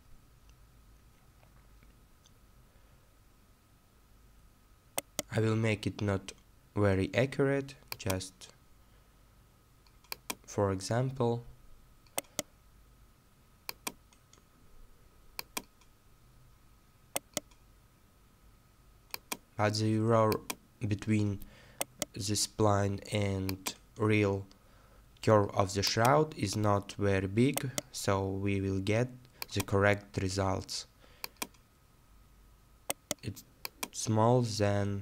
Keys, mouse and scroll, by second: 0.0-0.5 scroll down 1, 5.0 right click, 10.5-10.8 scroll down 1, 15.7-16.2 scroll down 1, 17.1 right click, 20.7-21.3 scroll down 1, 21.8 right click, 26.3-26.9 scroll down 1, 27.6 right click, 32.9 right click.